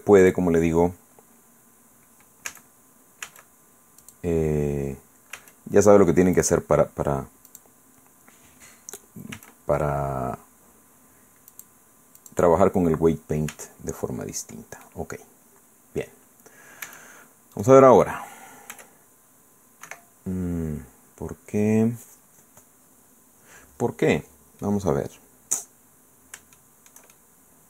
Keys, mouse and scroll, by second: 0.2 click, 2.5 a, 3.2 a, 4.0 click, 5.3 a, 6.4 click, 7.5 click, 9.3 a, 11.5 click, 12.2 click, 13.5 a, 14.8 click, 15.6 right click, 16.2 middle click, 16.8 Tab, 17.5 click, 18.7 r, 19.8 Escape, 21.9 scroll down 1, 24.6-25.8 drag, 26.6 shift+click, 27.5 click.